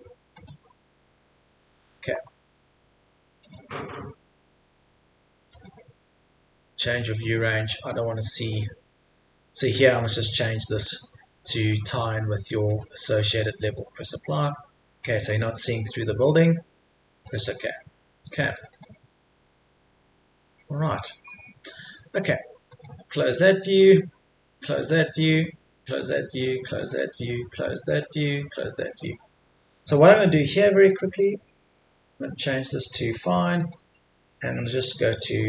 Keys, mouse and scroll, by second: 1.1-1.6 scroll down 1, 1.6 middle click, 2.1-2.7 scroll up 1, 3.4 click, 4.8-5.5 scroll down 1, 5.5-13.6 drag, 18.7-23.8 drag, 25.8 click.